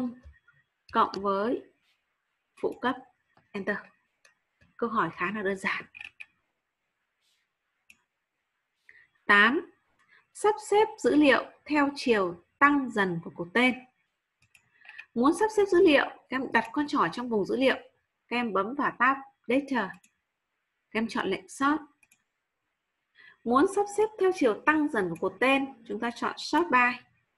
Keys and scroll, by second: 0.8 shift+=.